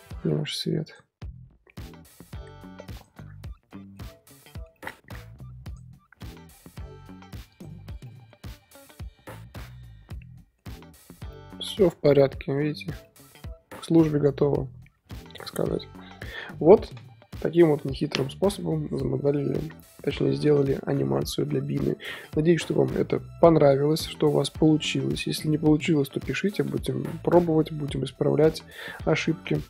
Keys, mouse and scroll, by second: 0.6-1.1 drag, 1.1-2.9 scroll up 3, 2.9 click, 3.4 scroll down 2, 3.5-3.9 middle drag, 3.9-4.5 scroll up 3, 4.5-5.6 shift+middle drag, 5.6 click, 7.5 click, 8.0-29.6 middle drag.